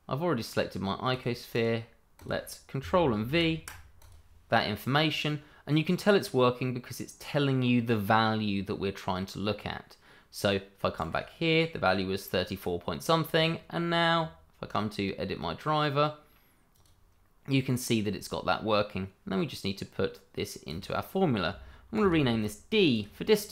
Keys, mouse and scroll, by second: 1.1 click, 1.5 right click, 2.1 click, 3.2 ctrl+v, 4.0 click, 11.1 click, 13.8 click, 14.6 right click, 16.7 click, 20.6 click, 21.9 d, 22.9 click.